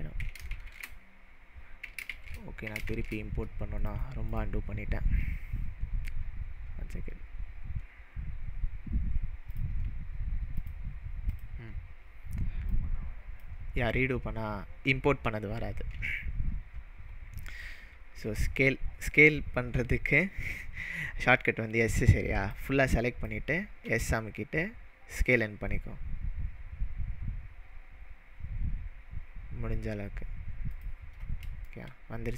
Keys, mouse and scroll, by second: 0.5 ctrl+shift+z, 2.2 ctrl+shift+z, 3.1 ctrl+shift+z, 3.9 click, 4.3-7.3 drag, 9.5 click, 12.7-13.6 drag, 22.5 drag, 22.9 drag, 23.2 click, 23.8 s, 30.7 click, 31.7-32.3 shift+middle drag.